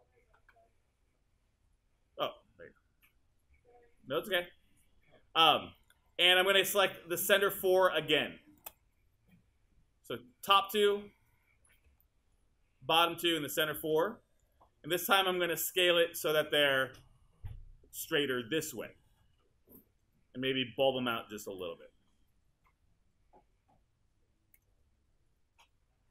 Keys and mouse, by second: 7.8-9.2 shift+drag.